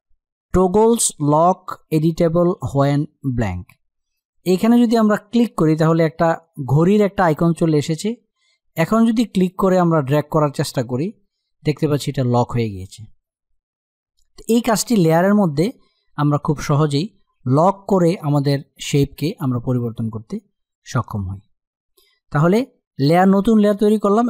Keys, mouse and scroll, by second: 5.0 click, 8.4 click, 19.6 click.